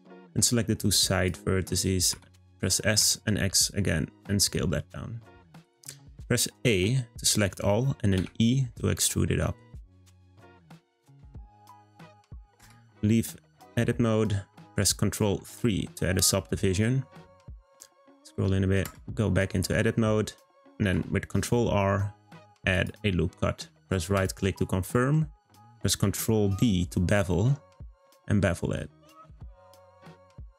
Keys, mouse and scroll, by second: 0.4 click, 2.1 s, 6.6 a, 8.2 e, 12.6 Tab, 15.4 ctrl+3, 17.0-17.8 scroll up 2, 17.8 scroll up 2, 18.8 Tab, 20.8 r, 26.0 b.